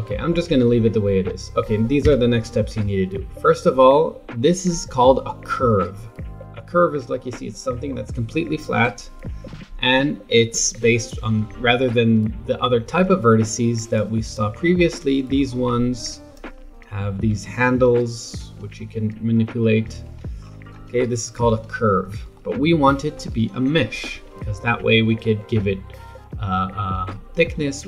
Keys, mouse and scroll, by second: 0.1 shift+middle click, 0.7 scroll down 1, 1.1-2.0 scroll up 1, 2.0 Tab, 6.6 Tab, 7.9-11.0 middle drag, 13.9 click, 14.7-16.0 scroll up 8, 16.0 click, 17.3 r, 20.4-21.5 scroll down 7, 21.5 KP_7, 22.3-24.1 shift+middle drag, 24.1 Tab.